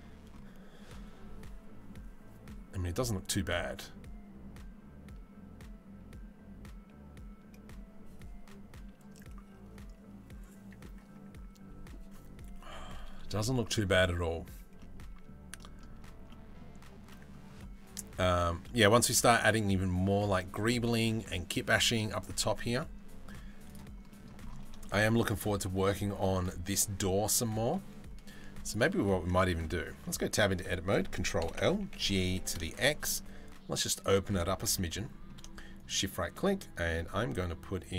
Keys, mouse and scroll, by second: 14.4-14.9 middle drag, 15.2 middle click, 15.9 middle click, 16.7 middle drag, 18.3 middle click, 23.7 middle click, 29.4 Tab, 29.9 click, 31.0 ctrl+l, 31.4 g, 34.1 Tab, 34.4 middle click, 35.4 shift+click, 35.8 shift+a.